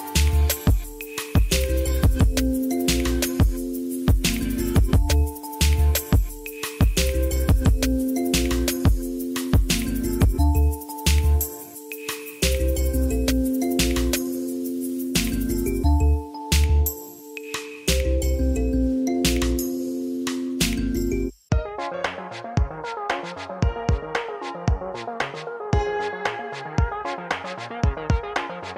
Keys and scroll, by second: 2.3 s, 3.1 s, 3.4 g, 4.9 g, 5.8 Tab, 9.9 Page_Up, 11.9 shift+a, 16.2 s, 24.6 ctrl+z, 26.5 Tab.